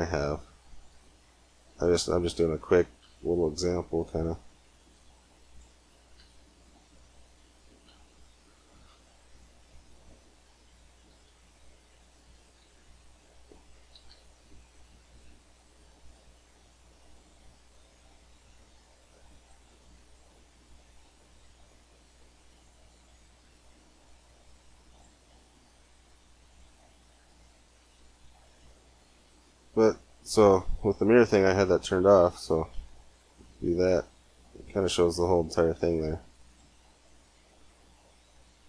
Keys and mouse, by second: 1.9 click, 3.7 c, 6.0 e, 8.2 s, 11.1 e, 12.4 s, 13.9 e, 14.9 s, 15.9 click, 19.5 g, 20.9 middle click, 23.9 middle click, 24.7-25.8 drag, 25.6 g, 31.5-33.3 drag, 34.0 click, 35.6 g, 37.0 g.